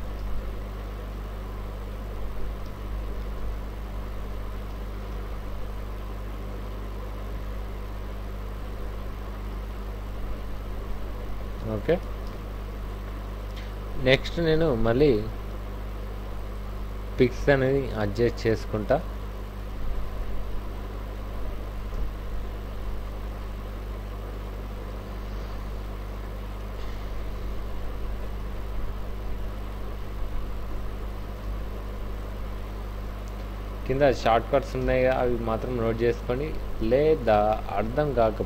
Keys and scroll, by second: 0.2 ctrl+t, 2.2 Down, 2.4 Down, 2.6 Left, 2.9 Left, 3.0 Left, 3.2 Left, 3.4 Left, 3.6 Left, 3.8 Left, 5.0 ctrl+shift+t, 7.4 ctrl+t, 9.1 Down, 9.2 Down, 9.5 Right, 9.7 Right, 11.2 Up, 12.3 ctrl+shift+t, 14.9 ctrl+t, 17.1 Down, 17.4 Right, 17.9 Right, 19.3 ctrl+shift+t, 22.0 ctrl+t, 23.2 Right, 25.3 ctrl+shift+t, 28.4 ctrl+t, 30.0 Down, 31.4 ctrl+shift+t, 34.8 ctrl+t, 37.4 Down, 37.6 Right, 37.9 Up.